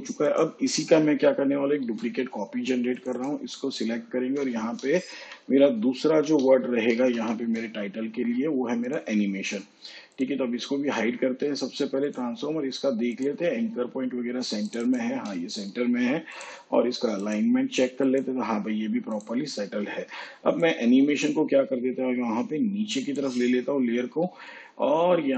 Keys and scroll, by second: 1.8 ctrl+d, 4.5-7.6 typing.